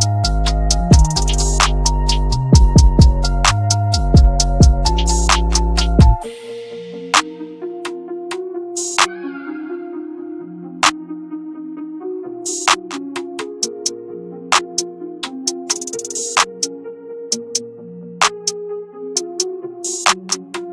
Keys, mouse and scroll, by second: 1.4 click, 2.1 scroll up 1, 3.1-5.0 drag, 5.6-6.0 scroll down 1, 6.0 scroll up 1, 6.6 ctrl+g, 8.0 click, 10.8 ctrl+space, 11.8 shift+click, 11.9-12.9 typing, 12.7 click, 13.2-13.6 scroll up 1, 13.6 scroll down 1, 14.2-14.7 scroll up 1, 14.7 scroll down 1, 15.7 click, 17.7 right click, 18.2-20.7 drag.